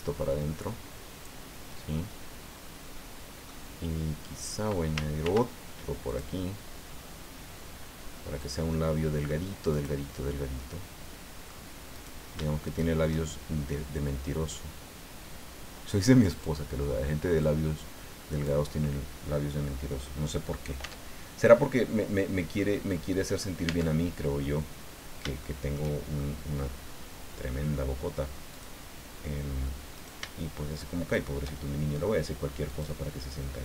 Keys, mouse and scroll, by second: 2.1-3.6 middle drag, 5.2 ctrl+r, 6.1 click, 8.4-9.5 drag, 9.7 right click, 10.2-11.7 middle drag, 11.7 click, 11.9 right click, 12.6 shift+right click, 13.9-16.6 drag, 17.4-18.6 drag, 18.7 scroll down 1, 19.9 middle click, 20.9 Tab, 21.5-22.7 drag, 22.7-23.1 scroll up 1, 23.6 Tab, 24.4-25.9 drag, 26.1 shift+scroll up 2, 28.5 click, 30.0 shift+right click, 31.1 shift+right click, 31.6 shift+middle click, 32.7-33.6 drag.